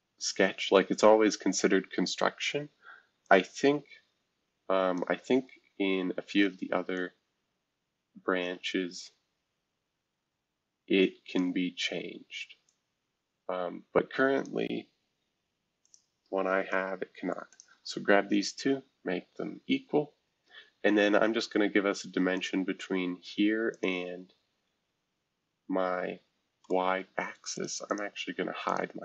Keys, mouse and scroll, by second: 3.2-5.0 drag, 6.9-11.4 drag, 12.6-14.5 drag, 15.8 click, 16.5 scroll up 2, 17.5-18.9 shift+drag, 17.5 shift+scroll up 1, 18.9-21.0 scroll down 1, 21.0-21.6 scroll up 5, 22.3 click, 23.7 shift+click, 24.5-26.4 scroll down 1, 26.6 middle click, 27.5 click, 27.9 click, 28.6 click.